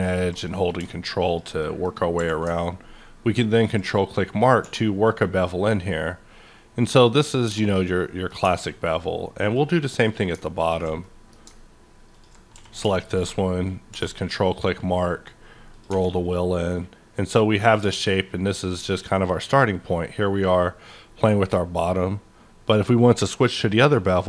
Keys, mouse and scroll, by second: 0.0 ctrl+click, 0.4 middle click, 1.6 middle click, 1.9 scroll up 2, 2.2 q, 3.6 ctrl+click, 4.6 1, 5.1-7.0 scroll up 11, 7.3 click, 7.3 click, 7.4 Tab, 7.6 scroll down 1, 7.8-9.4 middle drag, 8.4 Tab, 9.4 click, 9.9 click, 10.7 click, 11.0 middle click, 12.1 ctrl+click, 12.9 q, 13.9 1, 14.2-15.4 scroll up 12, 15.7 click, 15.9 Tab, 16.1-18.6 middle drag, 17.8 q, 18.6 click.